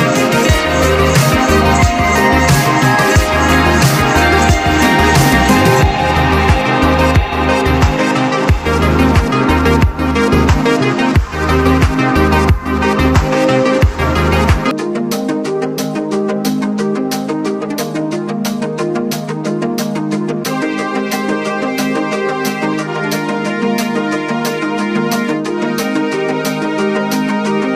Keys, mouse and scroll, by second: 2.6 click, 3.6 click, 4.9-7.6 typing, 5.8 click, 8.9-10.8 drag, 11.1 click, 11.4-12.6 scroll down 1, 13.7 click, 14.3-15.6 scroll down 1, 23.0-24.1 scroll up 1, 27.7 scroll up 1.